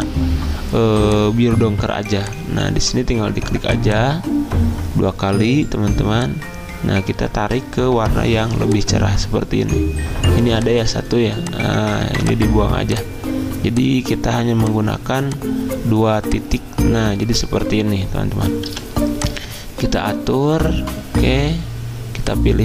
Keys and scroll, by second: 18.7 g.